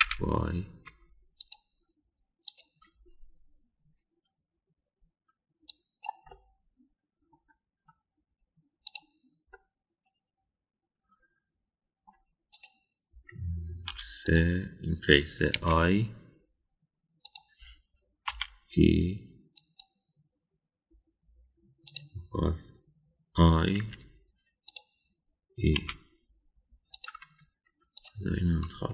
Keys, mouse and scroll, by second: 3.4 click, 6.7 click, 7.3-8.2 middle drag, 8.2 click, 9.8 click, 10.5-13.1 middle drag, 13.5 click, 14.9 3, 15.2 click, 16.5 i, 19.3 e, 22.9 click, 24.9 i, 26.9 e.